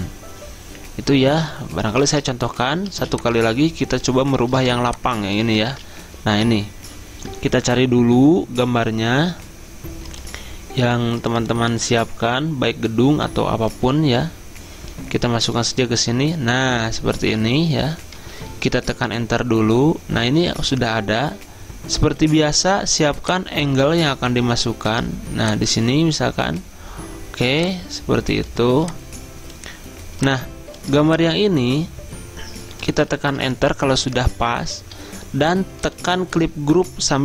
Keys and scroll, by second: 2.2 ctrl+d, 3.0 z, 4.6 v, 5.8 ctrl+z, 18.6 Return, 33.4 Return.